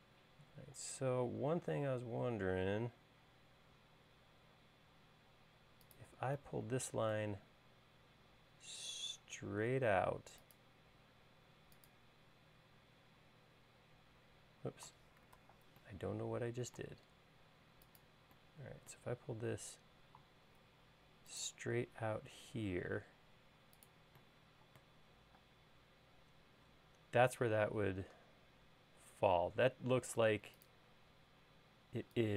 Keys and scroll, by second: 1.5 l, 15.4 super+z, 25.6 space.